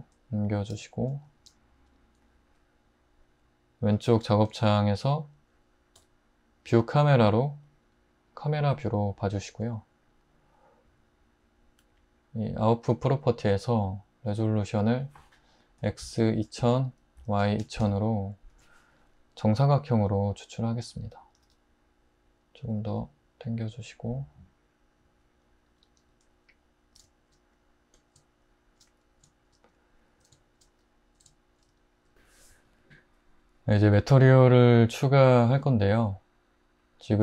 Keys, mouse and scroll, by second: 1.5 click, 5.9 click, 15.8-16.8 typing, 18.5 Return, 20.3-21.5 typing, 26.0 `.